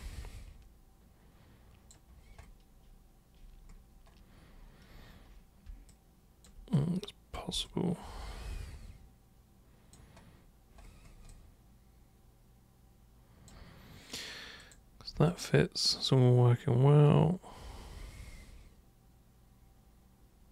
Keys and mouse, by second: 5.9 alt+super+click, 6.7 super+right click, 7.7-9.9 alt+super+drag, 11.3-13.4 alt+super+drag, 14.6 super+click, 15.3-20.5 alt+super+drag.